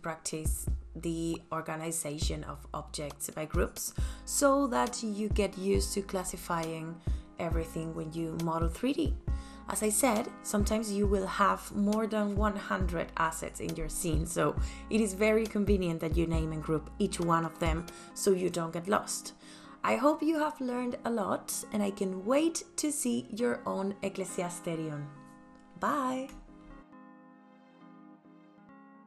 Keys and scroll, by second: 1.8 f, 2.1 Return, 8.2-9.1 typing, 12.7-13.7 typing, 15.5 Delete, 20.8-22.1 typing, 25.3 m, 28.6 ctrl+s.